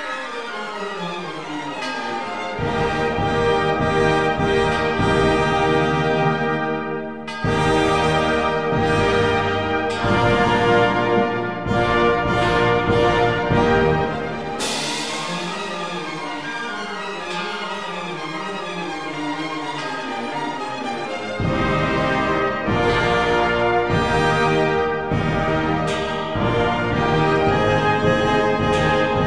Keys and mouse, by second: 1.3 click, 2.2 shift+click, 3.5 shift+drag, 4.1 shift+click, 5.1 f, 6.9 click, 7.5 shift+click, 8.4 f, 11.1 click, 18.2 ctrl+r, 19.9 click, 20.7 ctrl+r, 22.6 click, 27.9 click.